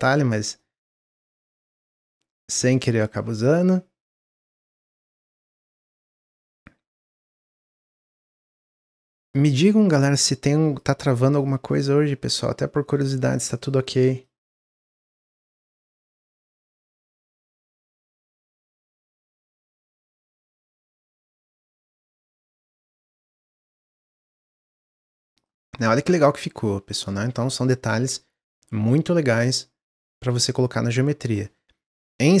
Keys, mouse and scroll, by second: 0.4 shift+click, 0.7 shift+click, 1.0 shift+click, 1.6 click, 2.9 click, 3.9-6.2 drag, 8.7-9.9 drag, 11.2 click, 12.2 click, 13.5 click, 14.1 click, 17.6-20.7 middle drag, 24.6-25.3 scroll down 2, 25.3 drag, 25.6 middle drag, 25.9 click, 26.3 middle drag, 26.6-26.9 scroll down 4, 26.9-27.8 middle drag, 27.8-28.3 scroll up 1, 28.3-31.5 middle drag.